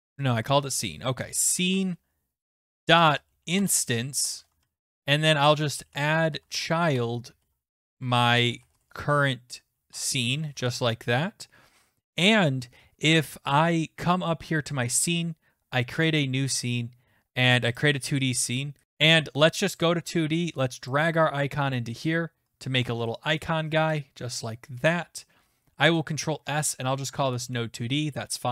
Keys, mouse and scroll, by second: 1.0-9.5 typing, 4.9 Return, 9.9 Tab, 10.5 ctrl+s, 15.0 click, 16.1 click, 17.8 click, 18.8 right click, 19.8 click, 21.8 click, 23.4 middle click, 24.9 click, 25.8 ctrl+s, 27.2 Return.